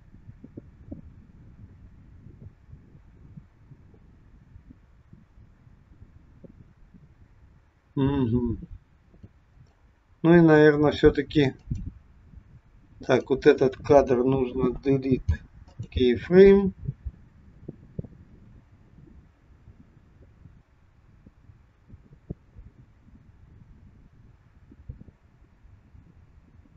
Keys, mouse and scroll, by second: 9.7 click, 11.7 click, 12.9 click, 14.6 Delete, 17.6 click.